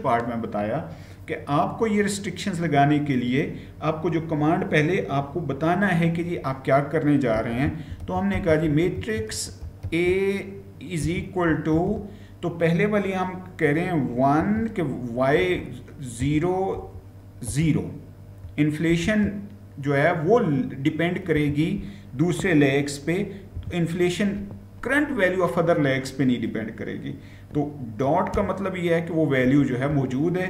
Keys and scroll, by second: 6.9-11.5 typing, 13.9-17.3 typing, 18.8 typing, 21.2 BackSpace, 23.1-23.9 typing, 27.9-29.3 typing.